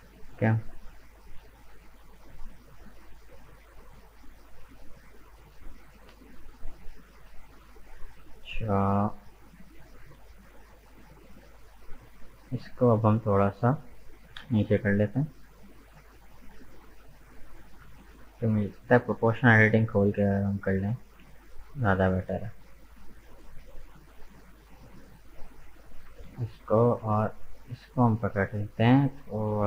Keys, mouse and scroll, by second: 0.0 Tab, 1.2 alt+right click, 1.8-4.9 middle drag, 5.9-8.8 middle drag, 8.8 right click, 10.0 right click, 10.7 shift+right click, 11.3 shift+right click, 11.5-14.4 middle drag, 14.4 g, 18.7 click, 19.6 g, 24.4-25.6 middle drag, 25.6 alt+right click, 26.2-27.4 middle drag, 27.4 alt+shift+right click, 27.8-29.1 middle drag, 29.1 g.